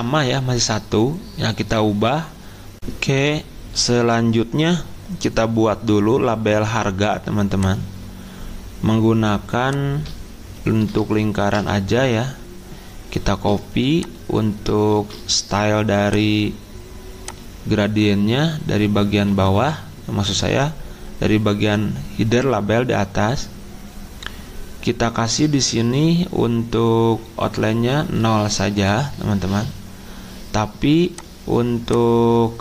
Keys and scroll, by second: 14.9 ctrl+s.